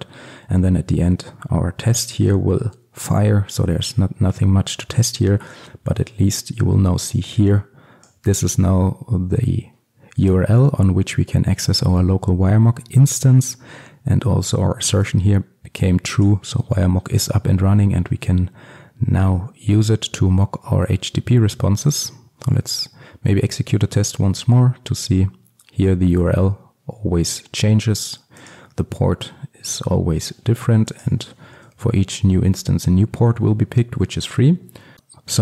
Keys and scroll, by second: 22.0 ctrl+F5, 31.7 ctrl+x.